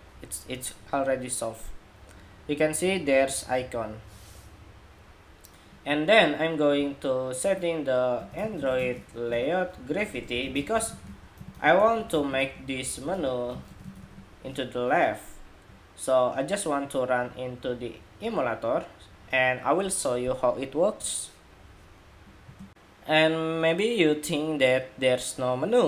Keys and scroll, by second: 22.4 shift+super+2.